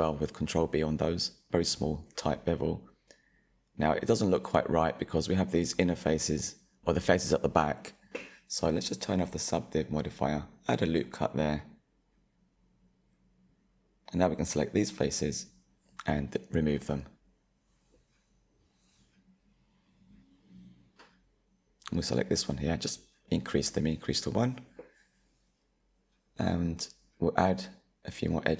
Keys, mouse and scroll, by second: 0.8 click, 1.1 Tab, 1.6-4.7 middle drag, 4.7-6.4 middle drag, 6.4 click, 6.7 shift+middle click, 7.2 click, 7.5-8.7 middle drag, 8.7 click, 9.1-10.4 middle drag, 10.4 ctrl+r, 14.3 3, 15.9 alt+click, 17.8 Delete, 21.3 2, 22.0 alt+click, 23.7-24.8 drag, 24.8-27.8 middle drag, 28.0 ctrl+r.